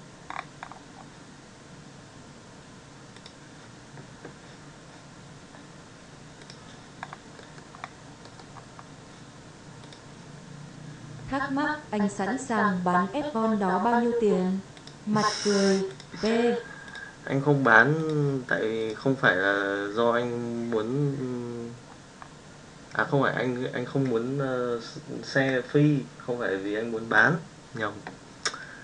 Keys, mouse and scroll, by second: 7.3 middle drag, 8.1 middle drag, 9.7 click, 15.9-16.9 drag.